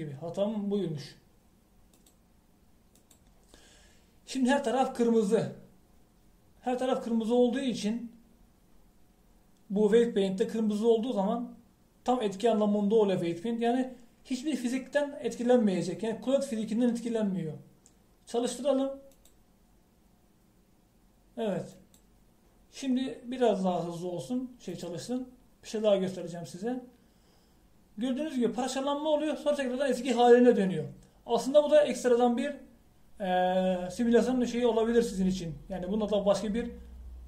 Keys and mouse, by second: 3.0-7.1 drag, 20.2-22.0 drag, 22.9-27.6 drag.